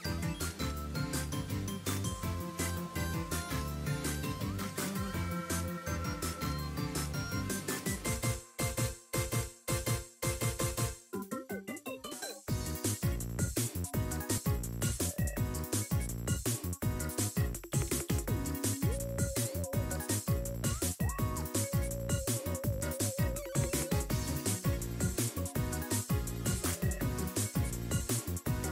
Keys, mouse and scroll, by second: 0.1 shift+middle drag, 0.4 scroll up 1, 0.8 r, 1.9 r, 4.5 r, 8.8 r, 10.6 r, 15.0 scroll down 1, 15.2-15.6 scroll up 1, 15.6 click, 16.0 scroll down 4, 16.1 middle drag, 16.4 shift+middle drag, 16.6-17.0 middle drag, 17.1 shift+middle drag, 17.3-17.6 scroll up 3, 17.4 middle click, 17.7 shift+middle drag, 18.0 scroll down 2, 18.1 middle click, 18.3 shift+middle click, 18.6 n, 19.2 click, 19.4 click, 20.5 n, 20.8 scroll down 1, 20.9-21.9 middle drag, 22.0 scroll up 3, 22.2 middle drag, 22.5 shift+middle drag, 25.5 click, 26.9-27.2 scroll up 2, 27.2 shift+middle click, 28.3 click.